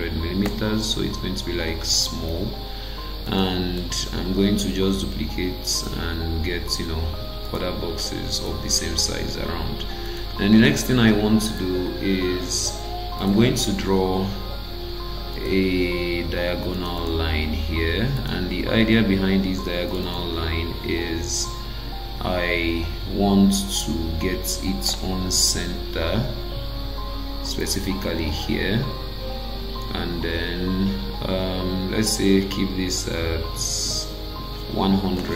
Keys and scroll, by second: 0.4 Return, 4.0 ctrl+d, 9.5 Escape.